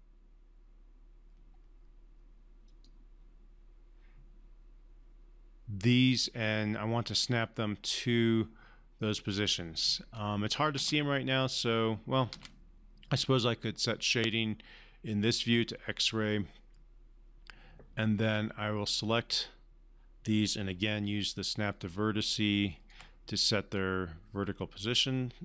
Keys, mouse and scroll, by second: 2.7 click, 10.7 space, 12.3 space, 14.3 click, 18.3-18.9 drag, 21.0-23.0 typing, 23.7-25.4 drag.